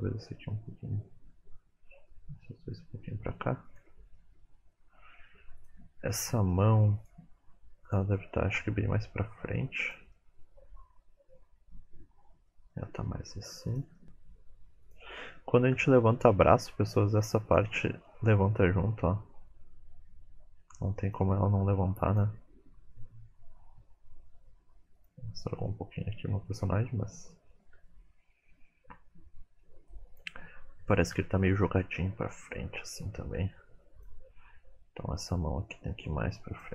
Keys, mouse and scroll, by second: 4.2 middle click, 5.6 click, 6.1 middle click, 7.0 click, 8.3 middle click, 8.9 g, 10.1 middle click, 11.9 middle click, 11.9 r, 12.3 middle click, 13.0 middle click, 13.0 r, 13.8 g, 15.7 KP_1, 16.3-16.8 scroll up 6, 17.5 click, 18.3 middle click, 18.7 r, 21.4 shift+middle click, 22.1 click, 22.9 r, 26.8-27.5 scroll down 3, 27.1 middle click, 27.5 shift+middle click, 27.9 middle click, 30.1 click, 31.1 KP_3, 31.9 r, 33.2-34.0 scroll down 1, 34.0 click, 34.0 scroll down 2, 35.9 g.